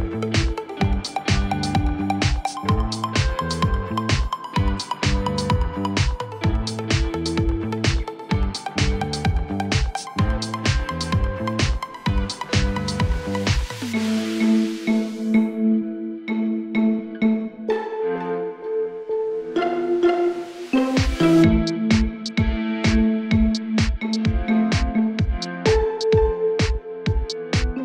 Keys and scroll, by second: 4.6 2, 7.4 F3, 11.7 F3, 12.6 F3, 18.0 F3, 22.4 F3.